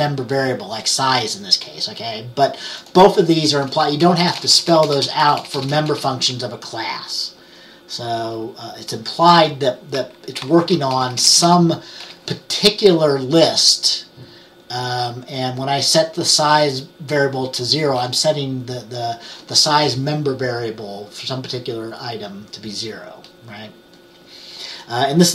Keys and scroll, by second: 3.8-6.0 typing, 10.7 Left, 11.0-12.1 typing.